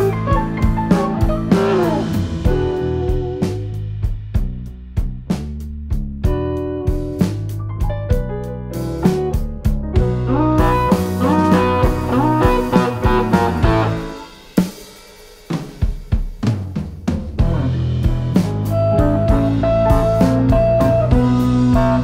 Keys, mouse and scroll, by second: 1.6 click, 2.1 click, 3.8 click, 4.3 click, 6.3 click, 7.5 click, 7.8 Tab, 10.3 click, 10.9 click, 12.3 Tab, 14.3 2, 15.3 alt+click, 16.6 ctrl+b, 21.6 click.